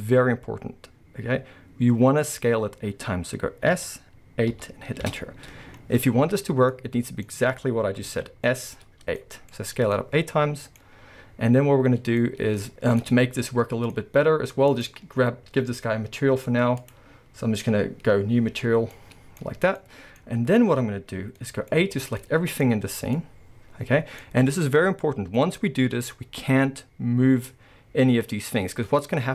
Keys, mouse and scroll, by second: 3.7 s, 5.1 Return, 5.6 scroll, 6.7 middle click, 7.3-8.1 scroll, 8.1 alt+a, 8.5-14.7 middle drag, 8.7-9.2 scroll down 2, 10.8-12.2 scroll up 2, 13.2 scroll down 2, 14.0-14.7 scroll up 1, 14.7 click, 16.8 click, 18.5-19.0 scroll down 1, 19.0-21.8 middle drag, 19.4-19.8 scroll up 1, 21.8 a, 22.2-25.7 middle drag, 22.7-23.2 scroll up 2, 24.2-25.4 scroll up 2, 28.7-29.3 middle drag, 28.7-29.3 scroll up 2.